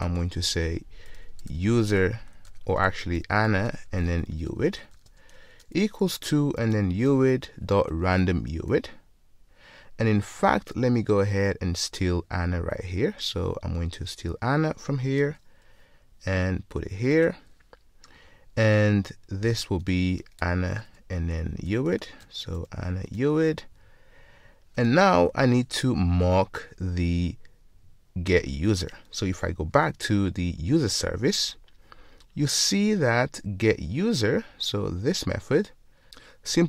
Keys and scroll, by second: 7.8 Return, 15.3 super+c, 17.4 super+v, 23.2 Return, 29.5 ctrl+shift+super+t.